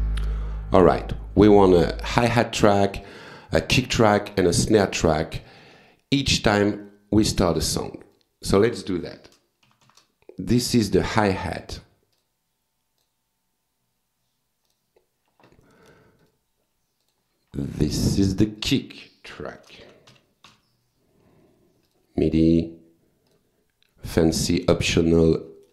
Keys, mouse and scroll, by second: 5.1 right click, 5.9 click, 7.6 click, 9.4 shift+h, 11.6 click, 12.1 click, 13.0 click, 14.7 click, 15.9 click, 16.2 right click, 17.0 click, 18.2 click, 19.4-21.0 typing, 21.9 click, 22.5 click, 23.3 click, 24.3 click, 25.4 click.